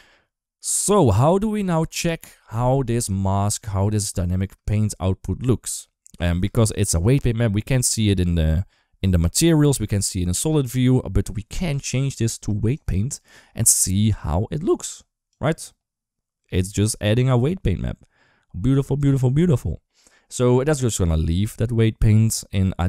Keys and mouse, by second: 3.4 click, 4.2 space, 11.3-12.7 drag, 15.1 click.